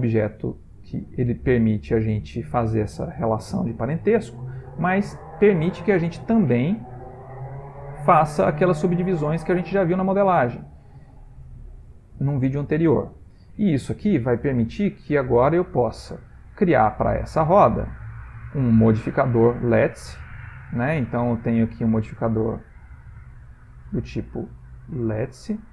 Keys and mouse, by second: 4.8 click, 6.2 click, 8.0 click, 8.6 click, 9.6 click, 9.9 click, 10.9 click, 11.3 click, 11.8 click, 12.6 middle click, 14.0 ctrl+middle click, 14.8 middle click, 15.9 click, 18.0 click, 19.9 click, 21.1 click, 21.7 click.